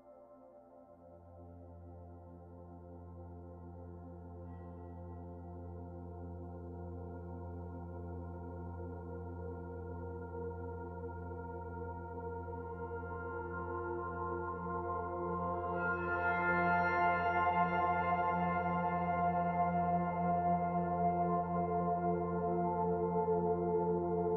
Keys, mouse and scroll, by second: 3.1 alt+click, 3.5 middle click, 5.1 middle click, 6.7 middle click, 11.3 e, 15.1 s, 23.0 middle click.